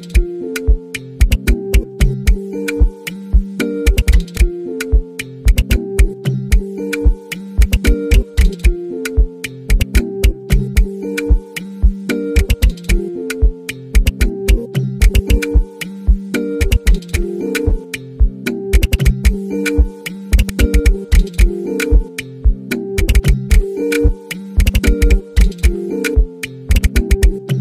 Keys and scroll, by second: 1.0-2.5 typing, 3.8 b, 5.4-11.0 typing, 12.5-27.6 typing.